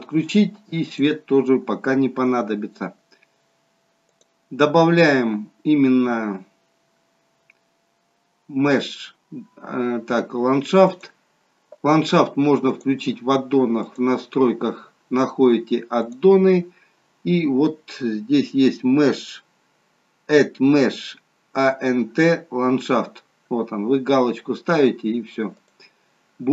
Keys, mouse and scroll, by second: 0.8 click, 4.0 click, 12.6 click, 16.0-17.8 drag, 17.9-19.0 scroll down 2.